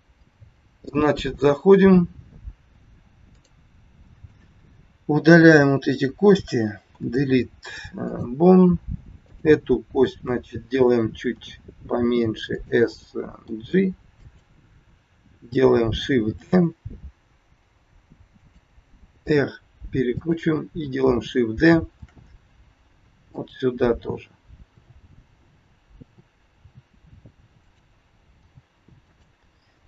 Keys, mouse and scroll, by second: 3.3 click, 4.3 shift+click, 6.9 Delete, 9.3 click, 11.3 s, 13.3 g, 16.3 shift+d, 19.2 r, 22.0 shift+d, 24.7 t, 25.9 t, 26.6 r, 28.3 g, 29.7 scroll up 3.